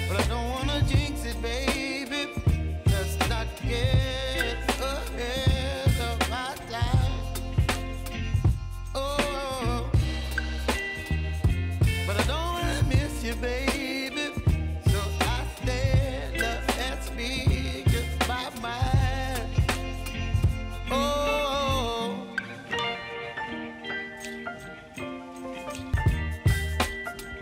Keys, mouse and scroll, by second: 0.0-0.8 typing, 1.1 Return, 2.7 click, 9.1 ctrl+d, 9.7 s, 10.4-17.3 drag, 19.1 ctrl+d, 19.7 s, 20.2-26.0 drag, 27.3 ctrl+d.